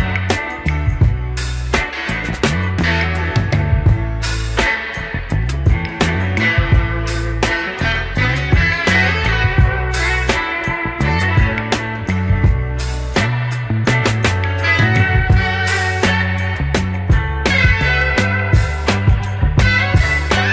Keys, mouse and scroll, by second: 0.4 Tab, 1.1 1, 1.8 click, 2.7 g, 9.4-9.9 scroll down 2, 10.7 scroll down 7, 11.2 shift+middle click, 11.7-12.7 scroll up 6, 13.1-14.0 scroll up 2, 14.0-14.7 scroll up 1, 14.7 Tab, 15.1 click, 15.4 click, 15.9 click, 16.1 Tab, 17.2-18.3 drag, 18.6 shift+click, 18.9 shift+click, 19.8 g.